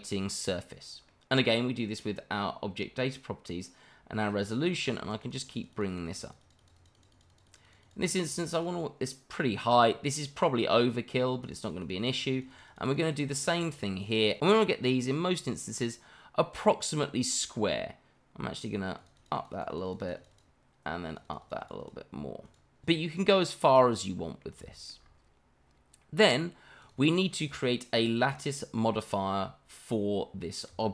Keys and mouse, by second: 4.4 click, 4.8 click, 5.0 click, 5.2 click, 5.4 click, 5.5 click, 5.7 click, 5.9 click, 6.0 click, 6.2 click, 6.4 click, 6.6 click, 6.8 click, 6.9 click, 7.1 click, 7.3 click, 7.5 click, 7.6 click, 7.8 click, 8.0 click, 8.2 click, 8.4 click, 8.5 click, 8.7 click, 11.4 click, 11.6 click, 11.8 click, 12.0 click, 12.2 click, 12.3 click, 12.5 click, 12.7 click, 12.8 click, 13.0 click, 13.2 click, 13.4 click, 13.6 click, 13.7 click, 13.9 click, 14.2 click, 14.3 click, 14.7-15.7 middle drag, 15.8-17.4 middle drag, 19.0 click, 19.2 click, 19.3 click, 19.5 click, 19.7 click, 19.8 click, 20.0 click, 20.2 click, 20.3 click, 21.1 click, 21.2 click, 21.4 click, 21.6 click, 21.8 click, 22.4 click, 23.1-24.4 middle drag, 24.7 shift+middle drag, 26.8 click, 27.6-28.8 middle drag, 30.7 click.